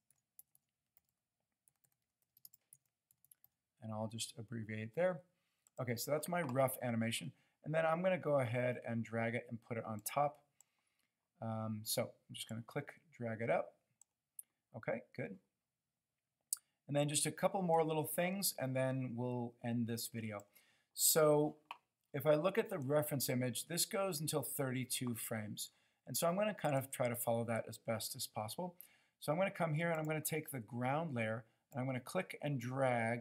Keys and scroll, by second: 0.3-3.2 typing, 5.5 typing.